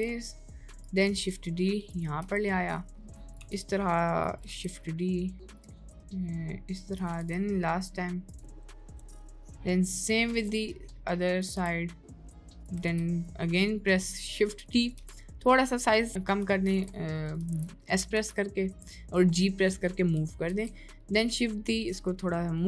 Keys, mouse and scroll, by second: 1.1 shift+d, 4.6 shift+d, 7.4 shift+d, 10.3 shift+d, 13.0 shift+d, 16.8 shift+d, 17.5 ctrl+z, 20.7 shift+d.